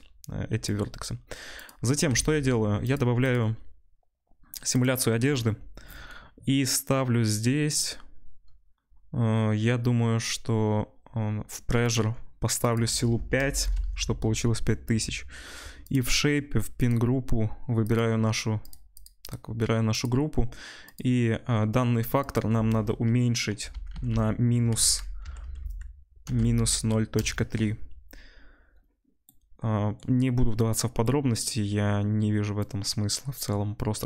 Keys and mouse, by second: 1.7-2.8 drag, 2.2 ctrl+s, 3.3-4.7 drag, 11.9-12.6 drag, 19.0 click.